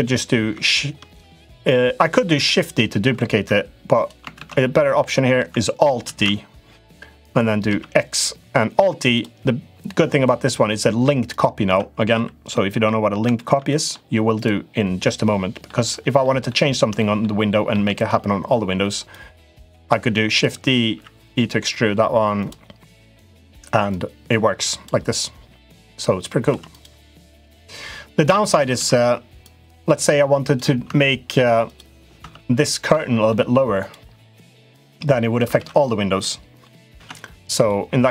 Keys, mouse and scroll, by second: 2.1 shift+d, 4.2 ctrl+z, 5.8 alt+d, 10.6 middle click, 11.1 click, 11.4 Tab, 11.9 Tab, 12.3 middle click, 13.1 middle click, 13.4 middle click, 14.1 click, 14.8 middle click, 16.0 middle click, 16.7 shift+middle click, 17.5 shift+d, 18.9-20.2 drag, 20.6 e, 23.7 click, 26.3 2, 26.4 click, 27.2-28.3 drag, 28.5 ctrl+z, 29.2-30.3 drag, 30.6 Tab, 31.4 click, 31.9 Tab, 32.4 middle click, 33.6 click, 34.5 click, 35.3 ctrl+z, 35.9 middle click, 36.7 Tab, 37.4 click, 37.8 click.